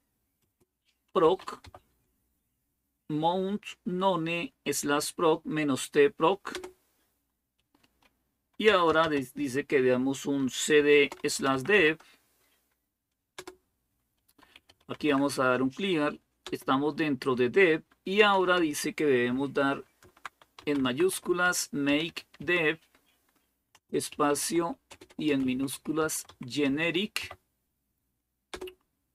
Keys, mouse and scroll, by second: 0.2-1.9 typing, 6.3 Return, 8.2-9.2 typing, 10.5-12.1 typing, 13.2-16.6 typing, 17.8-18.5 typing, 19.8-27.5 typing, 28.3 Return.